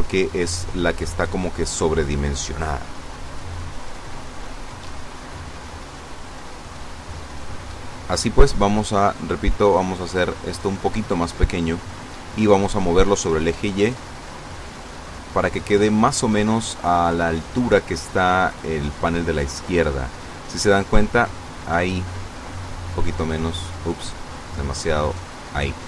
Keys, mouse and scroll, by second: 6.7 a, 10.3 click, 10.7 click, 11.2 click, 12.4 click, 13.3-14.3 drag, 19.6 click, 21.2 click, 22.7 click, 24.8 click.